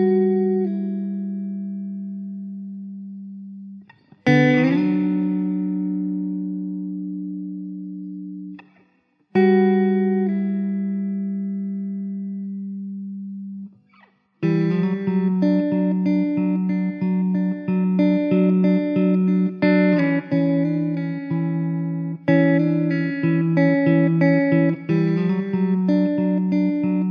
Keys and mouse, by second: 0.3 1, 4.0 w, 5.3 w, 6.2 w, 9.5 1, 21.9 alt+w, 22.7 middle click.